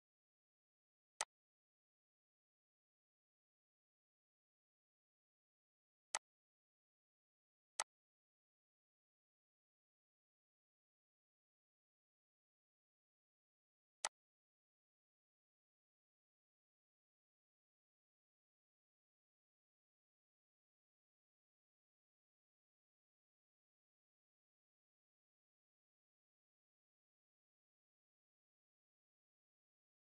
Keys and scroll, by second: 3.3 Delete, 10.7 8, 11.1 Return, 12.3 ctrl+a, 14.7 ctrl+a, 15.1 6.